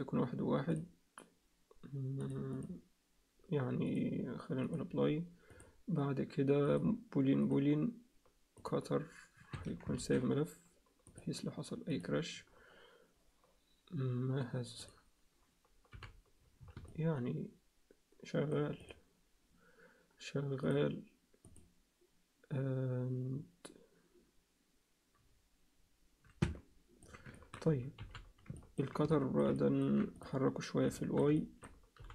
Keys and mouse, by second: 2.2 click, 3.8 click, 5.5-7.5 drag, 8.5-9.6 drag, 10.0 ctrl+s, 11.1 click, 14.8 click, 15.9 h, 16.9-18.5 middle drag, 20.7-23.0 drag, 26.4 alt+middle click, 27.3 ctrl+alt+middle click, 28.0 alt+h, 28.6 alt+middle click, 29.1 alt+middle click, 29.6 ctrl+alt+middle click, 30.9 alt+shift+middle click, 31.4 ctrl+alt+middle click, 31.9 g.